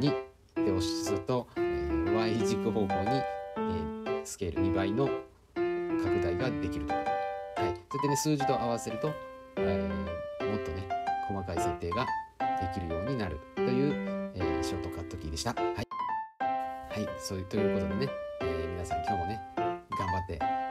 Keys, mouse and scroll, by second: 2.2-2.6 middle drag, 3.7 s, 8.4-9.3 middle drag, 11.0 shift+click, 12.4 s, 15.9-17.0 middle drag, 17.7 click, 19.5 s.